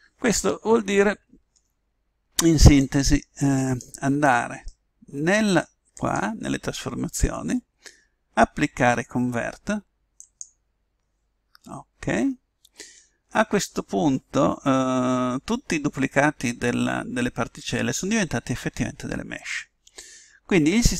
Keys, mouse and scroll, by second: 2.8 click, 5.9 click, 10.1 click.